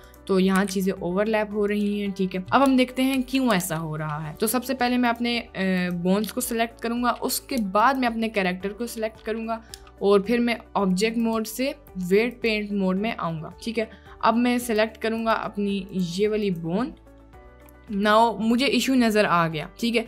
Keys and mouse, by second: 0.7 r, 2.8 Tab, 3.2 Tab, 4.4 click, 5.9 click, 7.8 shift+click, 8.9-9.3 drag, 11.3-12.7 drag, 13.0 middle click, 13.4 click, 14.7-15.3 drag, 16.0-17.2 drag, 17.7 click, 19.3 click.